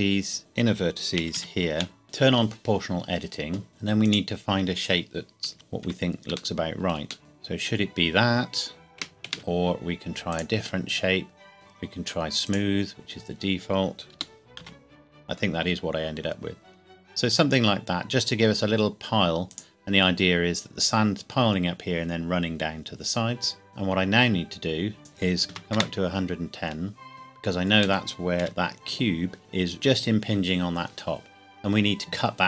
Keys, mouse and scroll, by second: 0.1-0.5 scroll up 1, 1.2 a, 1.3 a, 1.7 c, 2.0 o, 3.7 click, 5.5 KP_1, 5.8 scroll down 1, 6.5 shift+middle click, 7.2 scroll up 1, 9.2 Escape, 10.3 click, 12.5 click, 14.1 g, 14.6 z, 19.5 click, 23.7-24.2 scroll down 1, 25.0 click, 25.4 KP_1, 25.6 KP_0, 25.7 KP_Enter, 27.1 shift+middle click, 27.2 scroll up 1, 28.0 middle click, 28.4 KP_1.